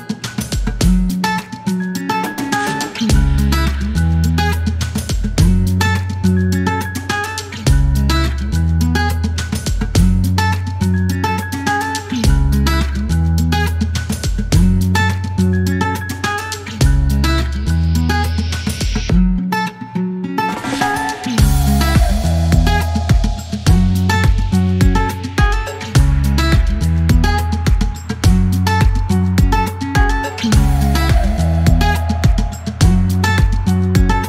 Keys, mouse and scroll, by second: 0.3 click, 0.9 click, 1.4 middle click, 2.2 click, 3.7 click, 10.0 click, 10.8 middle click, 11.3 click, 12.3 middle click, 13.4-17.0 drag, 18.0 click, 18.6 click, 20.8 click, 21.3 right click, 22.8 click, 23.5 click, 24.1 click, 24.6 right click, 25.7 click, 28.1 click, 29.4-32.8 shift+drag, 33.3 shift+click.